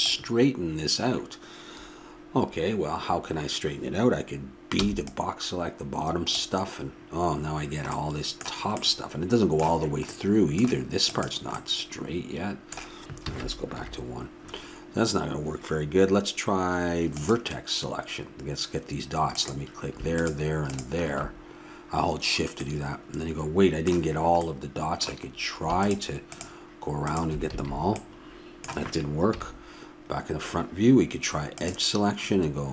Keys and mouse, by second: 4.8 b, 8.2-10.2 middle drag, 10.3 middle click, 11.1-13.0 drag, 11.1-13.3 middle drag, 13.3 a, 13.7 KP_1, 17.1-19.0 drag, 19.3-22.6 drag, 22.5-27.5 middle drag, 25.8-28.7 drag, 27.5 a, 29.3 KP_1, 31.6-32.7 drag.